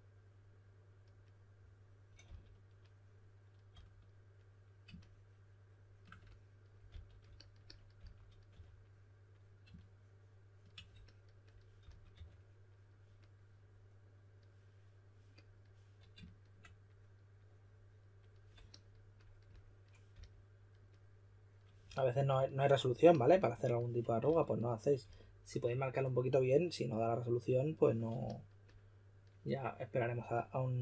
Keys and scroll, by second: 2.2 typing, 3.6 typing, 6.8 typing, 7.9-8.5 typing, 11.8-12.1 typing, 20.1 s, 24.2-25.0 typing.